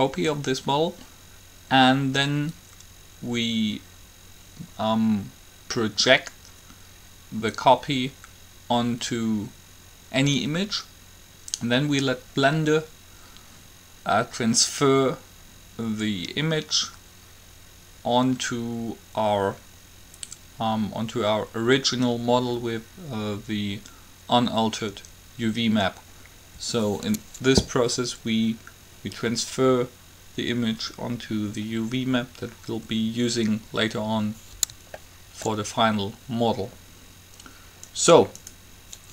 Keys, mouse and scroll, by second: 35.3-37.6 middle drag, 38.0 right click, 38.4-39.1 drag.